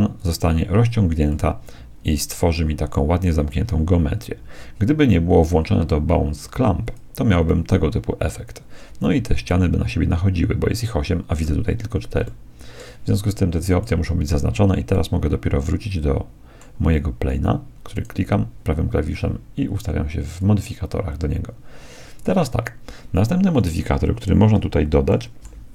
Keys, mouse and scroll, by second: 0.2-1.3 drag, 1.3 middle click, 1.5 click, 1.9-3.0 middle drag, 6.8-8.8 drag, 9.6-11.4 middle drag, 12.4-14.1 middle drag, 13.7-15.6 drag, 15.0 middle click, 15.6-16.8 middle drag, 17.9-19.8 right drag, 20.2-22.0 drag, 22.2-24.1 drag, 25.0-25.7 middle drag.